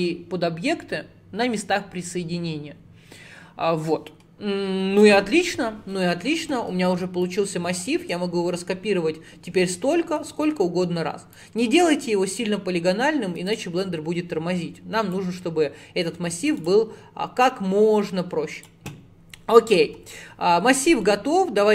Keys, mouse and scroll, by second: 1.4-2.6 scroll up 1, 5.0 click, 7.3 click, 8.0-8.9 scroll down 11, 9.5 scroll down 9, 9.7-11.4 middle drag, 11.4-13.6 drag, 14.3 scroll up 1, 15.2 click, 17.5 click, 19.9 /, 20.5 middle click, 21.1-21.7 scroll down 7.